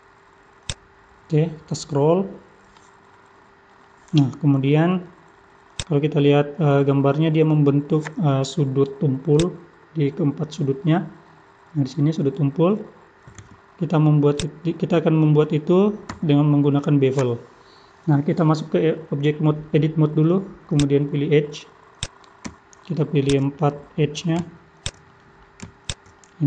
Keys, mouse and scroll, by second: 0.5 scroll up 1, 0.6 click, 1.0-2.0 scroll up 17, 1.6 middle click, 3.1 middle click, 14.3 click, 16.1 Tab, 20.7 click, 22.0 click, 23.2 shift+click, 23.6 middle click, 24.7 shift+click, 25.1 middle click, 25.8 shift+click, 26.2 middle click.